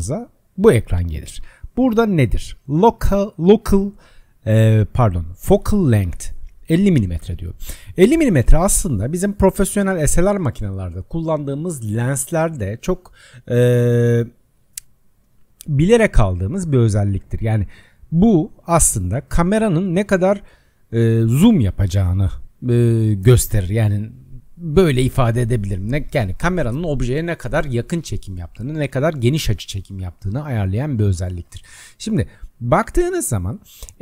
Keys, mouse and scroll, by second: 2.8-5.8 drag.